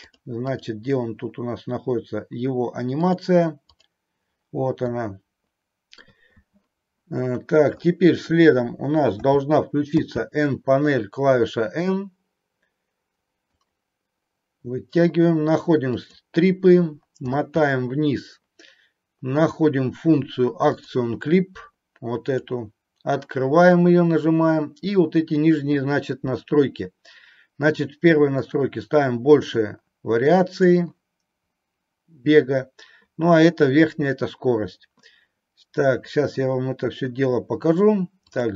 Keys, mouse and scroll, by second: 0.0 click, 0.4 click, 3.0 click, 4.8-6.0 middle drag, 9.1 n, 10.0 n, 13.4-15.4 drag, 15.9 click, 20.7 click, 22.2 click, 28.5-30.6 drag, 38.3 click.